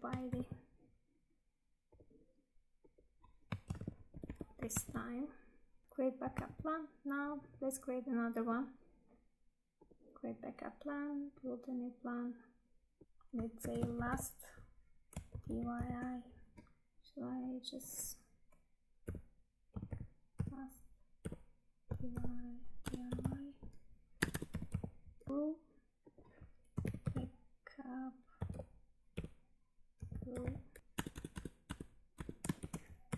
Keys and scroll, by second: 0.2 ctrl+c, 3.6 ctrl+v, 4.9 Tab, 6.4 Tab, 16.9 Tab, 25.3 Tab, 30.8 Tab.